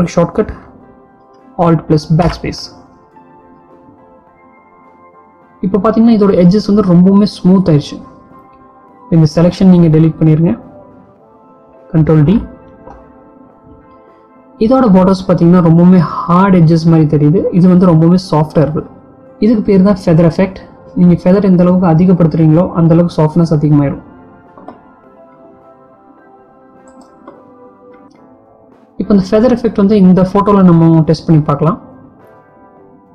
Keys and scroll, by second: 2.4 alt+BackSpace, 12.1 ctrl+d.